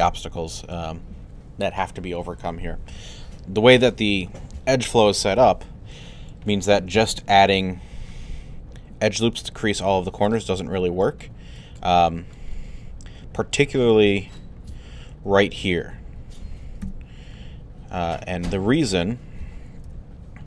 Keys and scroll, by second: 5.4 w, 7.4 alt+1, 8.1 1, 16.8 3, 19.8 alt+1.